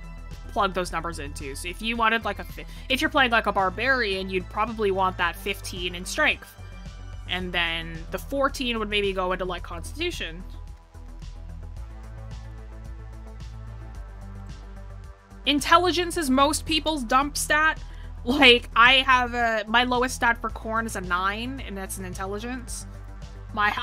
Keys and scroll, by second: 0.8 ctrl+z.